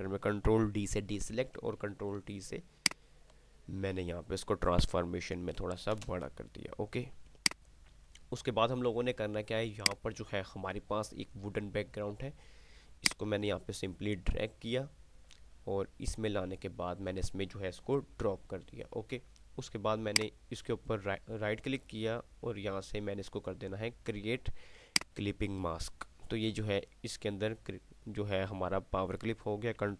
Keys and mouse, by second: 0.6 ctrl+d, 1.4 t, 2.6-5.4 alt+shift+drag, 13.1-19.1 drag, 20.3 right click, 25.1 click.